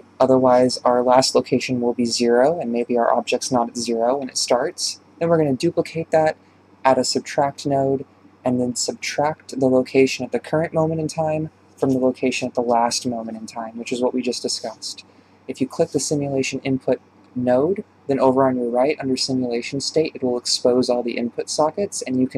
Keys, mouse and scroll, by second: 0.3 click, 1.3 click, 2.0 Delete, 4.3 click, 4.5 shift+d, 6.3 click, 13.4 click, 19.6 click, 19.7-22.3 drag.